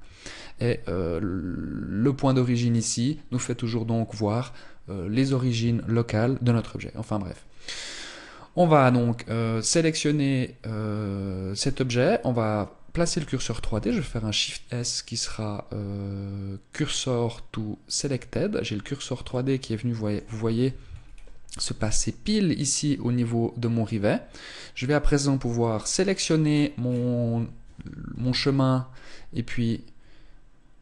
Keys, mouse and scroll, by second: 7.6 right click, 9.1 right click, 11.2 right click, 13.5 shift+s, 18.4-19.1 scroll up 2, 19.1 middle click, 20.3 z, 20.5-20.9 scroll up 3, 21.5 middle click, 24.5 right click, 25.3 middle click, 26.1-27.7 scroll down 5, 27.7 scroll down 2, 27.7 KP_1.